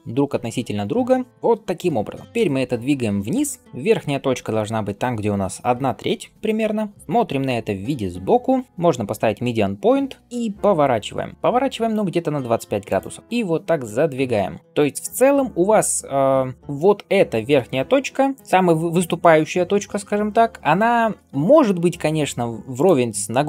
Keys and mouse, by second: 0.6-7.7 middle drag, 2.2 g, 7.7 KP_3, 8.6-23.4 shift+middle drag, 10.2 r, 13.2 g, 21.2 g.